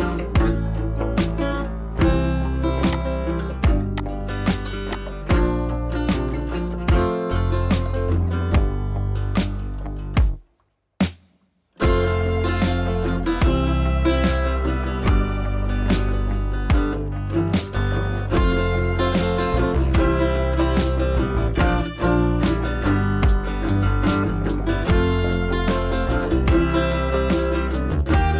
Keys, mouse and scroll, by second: 0.7 click, 2.2 scroll down 1, 2.8 click, 3.2-5.5 typing, 3.6 scroll up 1, 3.9 click, 4.5 scroll up 1, 4.9 click, 7.2 click, 9.6 click, 18.6-20.9 typing, 21.0 Return, 23.0 click, 24.5-25.9 typing, 28.0 click, 28.0 click.